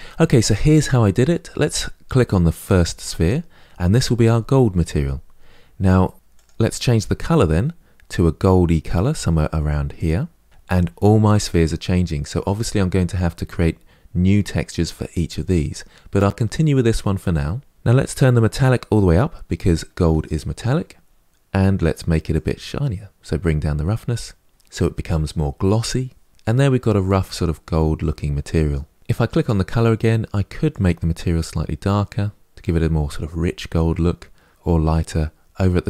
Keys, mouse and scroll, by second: 2.5 click, 18.4-29.0 drag, 30.4 click.